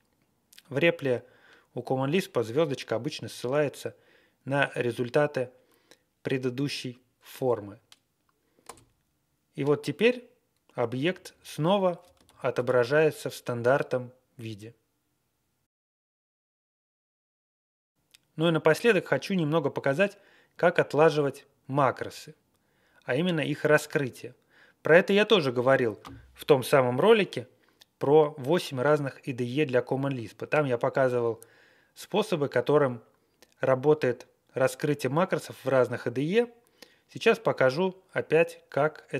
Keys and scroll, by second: 8.6 Return, 11.0 Up, 11.2 Up, 11.6 Down, 11.9 Left, 12.2 ctrl+a, 12.5 ctrl+space, 12.6 ctrl+e.